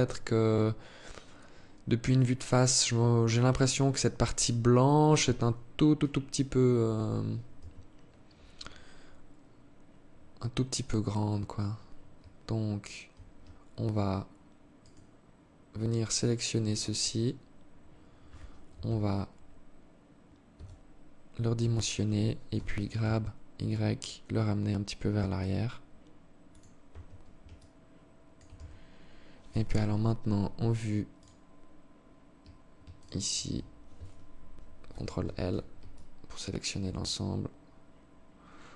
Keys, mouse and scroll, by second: 6.2 Escape, 7.0 Tab, 7.4-7.8 scroll up 3, 8.4 scroll up 2, 14.2 alt+right click, 15.5 alt+right click, 18.1 KP_3, 19.9 s, 21.9 g, 26.3 Tab, 26.9 alt+click, 28.0 Tab, 29.0 z, 29.5 scroll up 2, 30.6 right click, 32.4 alt+shift+right click, 34.2 ctrl+l, 35.3 alt+click.